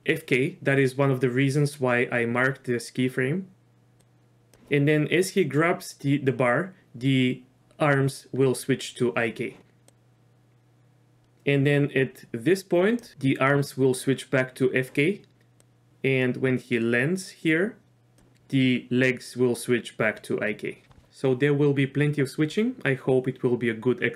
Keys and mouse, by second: 4.0 click, 9.9-13.1 drag, 15.6-18.2 drag.